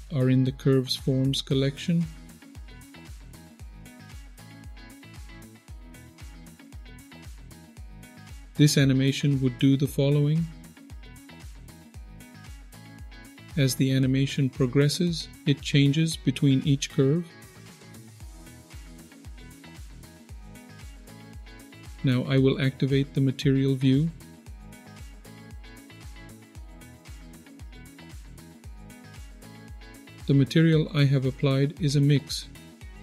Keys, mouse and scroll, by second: 3.3 click, 4.0 click, 4.5 click, 4.8 click, 5.1 click, 6.0 click, 6.1 click, 6.5 click, 12.2 click, 12.9-13.2 scroll down 2, 13.0 middle click, 14.1 middle click, 15.1-21.6 drag, 24.5 click, 25.5 click, 25.7-26.7 middle drag, 32.4-33.0 scroll up 11.